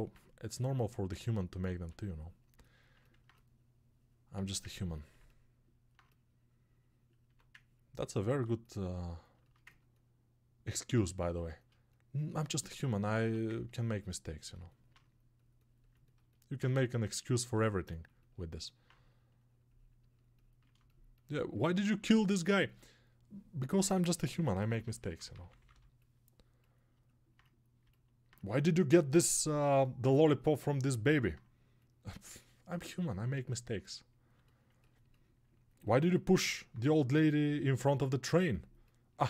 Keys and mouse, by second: 0.0-7.4 drag, 7.4-10.8 ctrl+right drag, 10.8-12.4 ctrl+alt+drag, 12.4-16.1 ctrl+alt+right drag, 16.1-39.2 alt+drag.